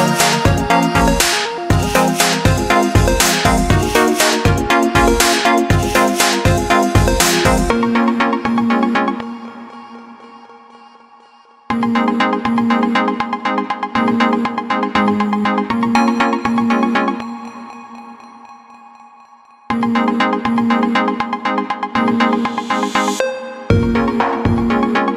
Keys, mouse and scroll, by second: 0.1 click, 0.2 i, 0.6 click, 0.8 a, 1.0 click, 2.4 right click, 2.8 click, 3.2 right click, 4.4 click, 4.8 right click, 6.6 click, 8.3 ctrl+z, 8.4-8.7 typing, 9.3 ctrl+z, 9.6 click, 11.6 click, 14.6 click, 15.8-16.1 typing, 16.5 click, 16.7 ctrl+z, 17.0 click, 20.0 click, 21.2 ctrl+z, 21.4 click, 23.3 shift+click, 24.1 click.